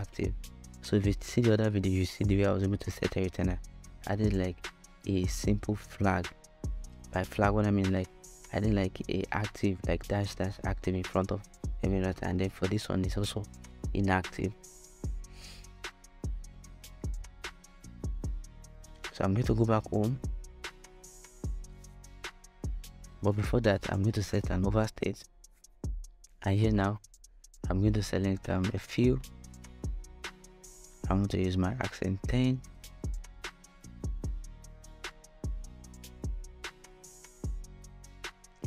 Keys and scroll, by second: 3.8-7.5 typing, 8.7-10.6 typing, 38.2 5, 38.4 Return.